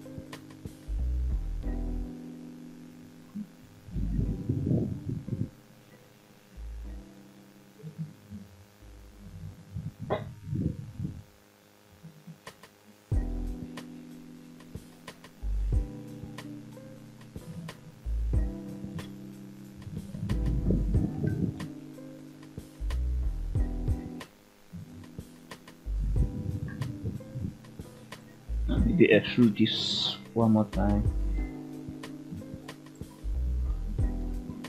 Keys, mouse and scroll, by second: 1.2 click, 1.8 g, 2.8 click, 3.9 e, 5.1 click, 5.8 click, 6.2 g, 8.5 drag, 9.2 click, 9.5 g, 11.5 click, 12.5 click, 12.9 g, 13.7 click, 14.2 middle click, 15.4 click, 16.0 shift+click, 16.9 shift+click, 17.6 shift+click, 18.1 middle click, 19.3 f, 20.2 click, 21.4 g, 22.9 click, 23.2-23.6 scroll down 2, 23.6-26.3 middle drag, 26.8-27.9 scroll up 3, 27.9 click, 29.6 ctrl+right click, 31.9 scroll down 2, 32.3 shift+middle click, 32.8 middle click, 34.4 ctrl+right click.